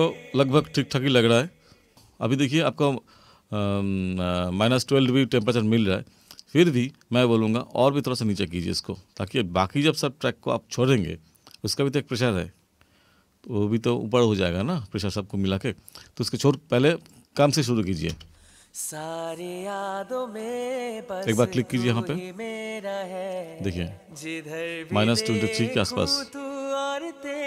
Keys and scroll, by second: 18.2 space.